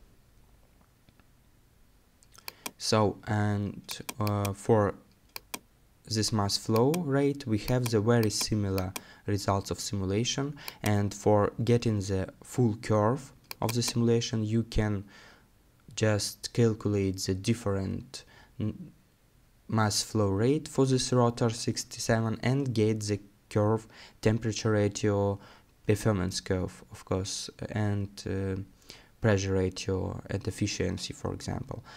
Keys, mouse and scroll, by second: 1.6-2.6 scroll up 1, 26.6 middle click.